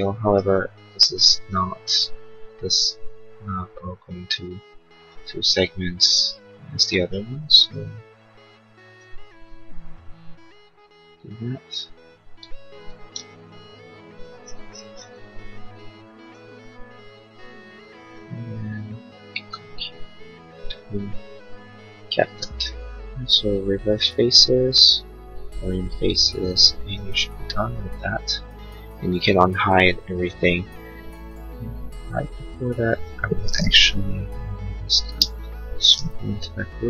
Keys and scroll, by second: 13.2 ctrl+z, 22.2 space, 22.8 space, 33.7 p, 35.0 space.